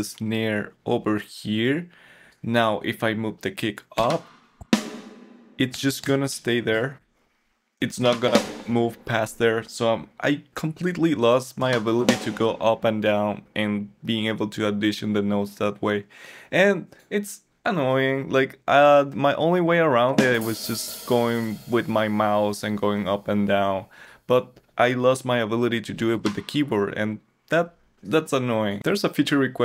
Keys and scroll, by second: 4.0 Up, 8.0 Down, 8.2 Up, 11.6 Down, 12.0 Up, 26.1 Down.